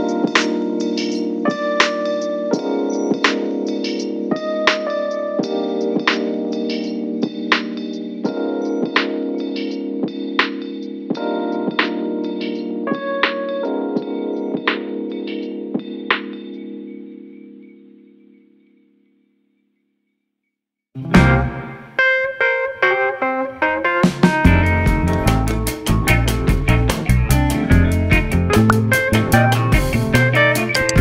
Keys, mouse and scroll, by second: 2.4 click, 3.0 click, 3.9 shift+s, 5.4 shift+a, 7.9 r, 10.0-11.7 middle drag, 11.7 g, 21.8-22.9 middle drag, 22.9 shift+d, 25.1 click, 27.7 KP_3, 28.6 Tab.